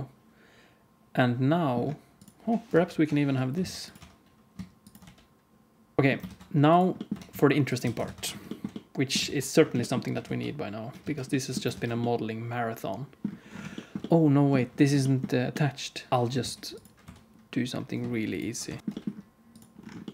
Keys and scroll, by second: 2.6-4.9 typing, 6.0 alt+a, 6.0 s, 6.0 g, 7.0 r, 7.8 alt+a, 8.0 ctrl+s, 9.2 ctrl+s, 10.1 alt+shift+z, 11.7 ctrl+s, 16.1 KP_1, 16.3 shift+d, 17.0 r, 18.6 r, 18.8 g, 18.8 g.